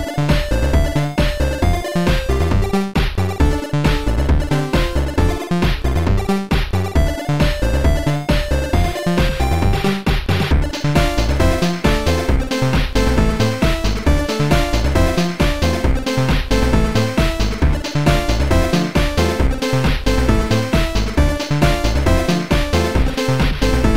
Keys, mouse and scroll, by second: 2.0 click, 3.2 click, 4.7 click, 10.0 click, 10.4 click, 12.1 click, 13.2 click, 14.7 click, 15.7 click, 16.9 click, 20.1 click, 21.0 click.